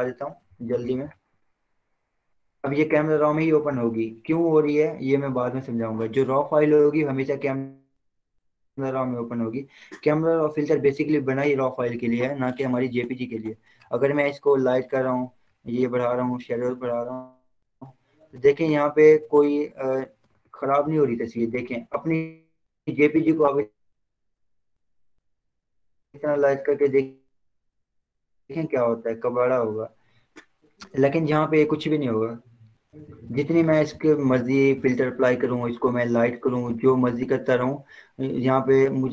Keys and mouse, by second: 0.5 ctrl+0, 11.9-19.0 drag, 19.0 Return, 31.1 ctrl+0, 31.9 ctrl+j, 32.6 click, 35.7 click, 37.3 click.